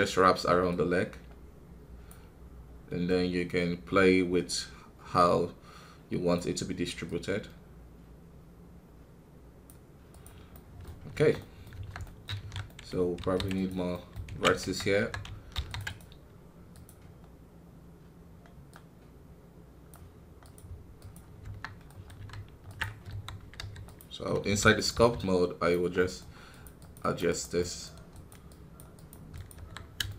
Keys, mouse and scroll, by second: 10.5 middle click, 10.9 scroll up 2, 11.1 Tab, 11.3 middle click, 11.7 Tab, 12.0 middle click, 12.3 alt+a, 12.6 middle click, 13.1 ctrl+r, 13.9 middle click, 14.2 ctrl+z, 16.7-19.7 drag, 21.6 scroll down 1, 21.8 middle click, 22.1 scroll up 2, 22.3 ctrl+Tab, 23.0 KP_3, 23.5 d, 23.8 click, 24.4 f, 25.1-27.5 drag, 27.5 middle click, 28.4-29.5 drag, 29.5 KP_1, 29.7 scroll down 2, 30.0-30.1 shift+middle drag.